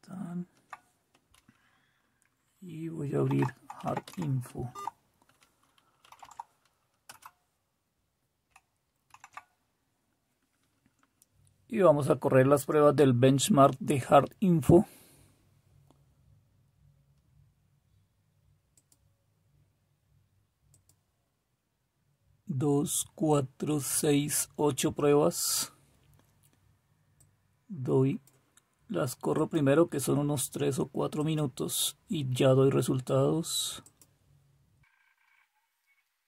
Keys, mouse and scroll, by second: 3.9-4.6 typing, 4.6 Tab, 6.8-7.7 typing, 9.0 super+w.